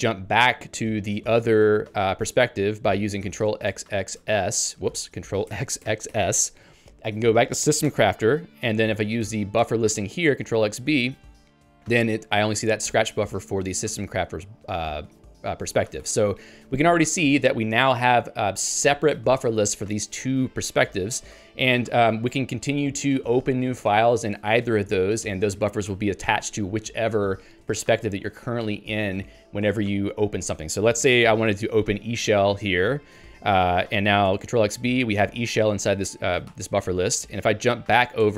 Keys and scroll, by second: 5.0 ctrl+g, 7.8 Return, 16.0 ctrl+g, 21.4 ctrl+g, 32.4 Return, 36.6 ctrl+g.